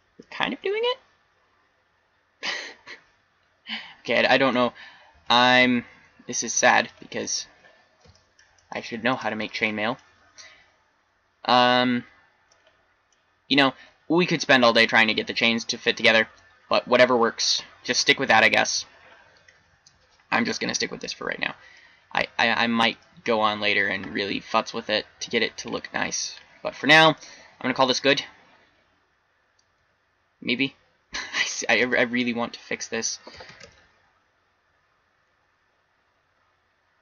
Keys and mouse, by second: 2.1-3.6 middle drag, 4.6 z, 5.2 z, 5.6 x, 8.9 middle click, 9.1 middle click, 9.5-10.0 middle drag, 13.3 middle click, 24.1 middle click, 24.8 middle click, 25.4 middle click, 29.8-31.8 typing, 33.5 shift+d.